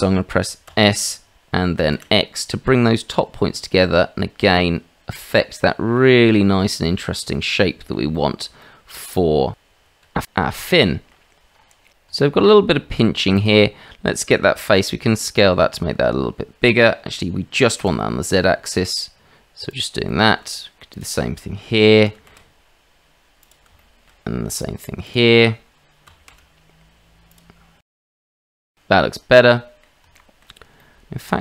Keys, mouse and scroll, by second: 0.7 s, 7.5 middle click, 8.1 shift+middle click, 8.6 middle click, 10.0 Tab, 10.8 shift+middle drag, 11.9 ctrl+z, 12.2 shift+middle click, 14.0-19.8 middle drag, 20.1 shift+middle click, 22.0 s, 23.7 shift+middle click, 25.1 click, 26.0 s, 29.6 middle click, 30.2 shift+middle click, 30.8 middle click.